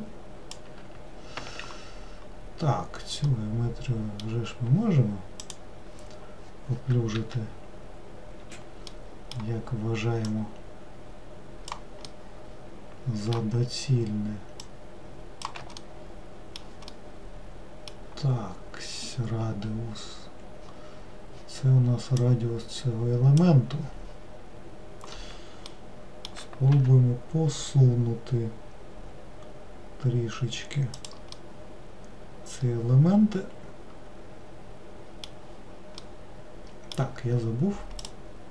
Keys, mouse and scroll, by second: 1.4 ctrl+z, 3.3-5.5 middle drag, 5.5-7.3 drag, 7.3 w, 8.5 w, 9.0-10.3 middle drag, 10.3-12.2 drag, 12.2-14.7 middle drag, 14.7-15.9 shift+drag, 15.9-20.1 middle drag, 22.3-25.3 drag, 25.8-26.8 middle drag, 26.8 g, 31.5-34.5 middle drag, 36.1-38.1 middle drag, 38.1-38.5 drag.